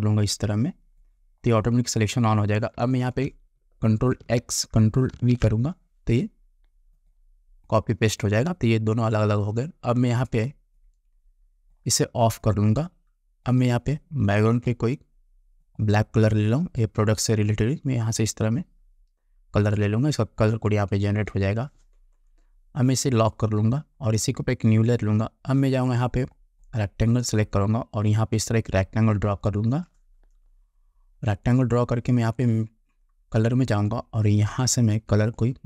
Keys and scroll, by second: 4.5 ctrl+x, 5.2 ctrl+v, 21.6 ctrl+v.